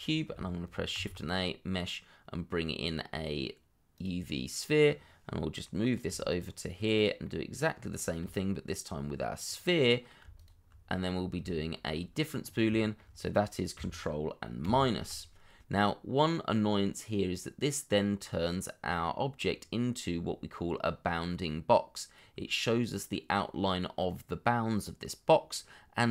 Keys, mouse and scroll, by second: 0.0 scroll down 1, 0.9 shift+a, 5.6 middle click, 6.1 g, 7.2 middle click, 8.2 g, 9.8 middle click, 10.3 shift+click, 11.2 scroll down 1, 11.7 shift+middle click, 12.4 scroll up 1, 12.7 shift+middle click, 14.6 ctrl+KP_Subtract, 15.8 middle click, 19.4-21.1 scroll up 1, 21.1 middle click.